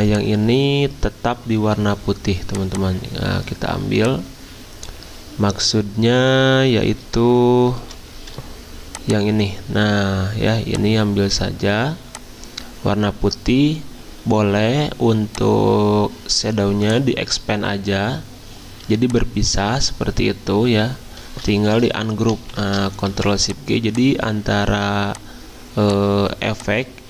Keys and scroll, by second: 7.2 x, 7.8 c, 8.1 x, 10.7-11.4 typing, 24.7 ctrl+shift+z.